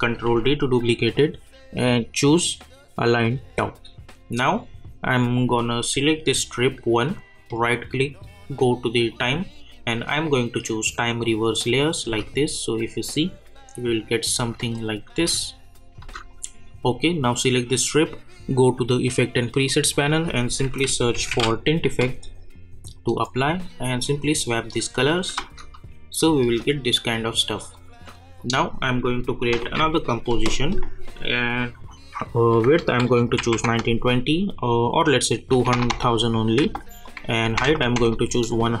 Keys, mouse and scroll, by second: 0.2 ctrl+d, 3.2 click, 6.6 click, 7.5 right click, 9.1 click, 12.0 space, 14.3 space, 14.7 click, 15.1 space, 16.3 click, 20.3-21.8 typing, 22.9 click, 25.4 space, 27.7 click, 29.6 ctrl+n, 31.6 click, 35.0-37.0 drag.